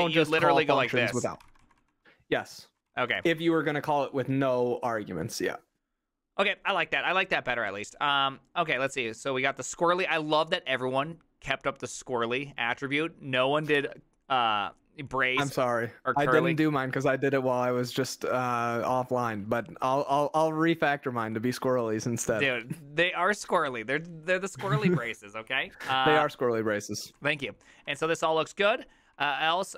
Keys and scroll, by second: 0.1-2.9 typing, 3.2 ctrl+c, 4.1-4.9 typing, 26.8-29.7 typing.